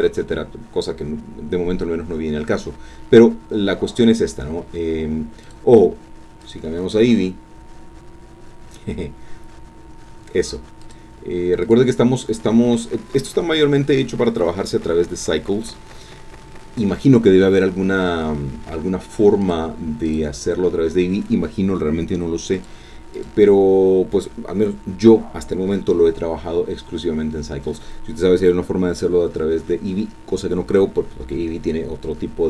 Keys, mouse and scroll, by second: 5.4 click, 6.4 click, 10.8 click, 11.6 click, 19.4 click, 20.1 click, 22.5 click, 23.1 click.